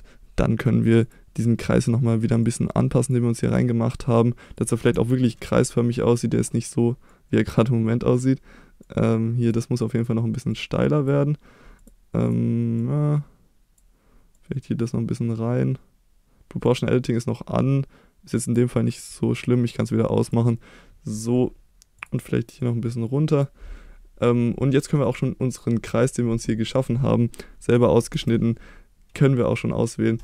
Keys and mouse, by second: 1.0 click, 1.8 click, 2.4 click, 3.5 click, 4.0 click, 4.9 KP_1, 7.1 click, 8.1 click, 8.8 click, 10.5 click, 20.2 click, 22.6 click, 28.1 3.